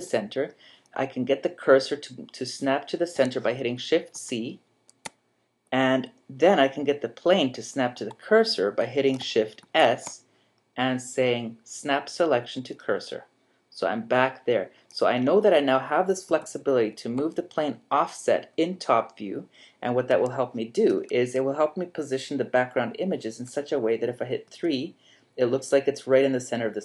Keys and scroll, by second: 4.1 shift+c, 9.6 shift+s, 16.3 g, 24.5 3.